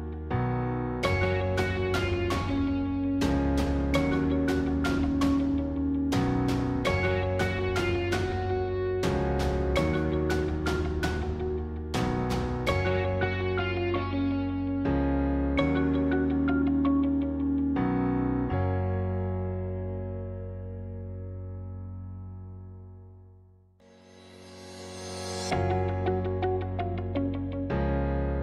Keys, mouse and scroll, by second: 3.6 shift+click, 4.2-6.4 middle drag, 6.4 shift+click, 7.9-13.4 middle drag, 13.4 shift+click, 14.4-18.2 middle drag, 18.2 click, 19.3 s, 22.8 g, 25.0-26.1 middle drag, 26.1 click.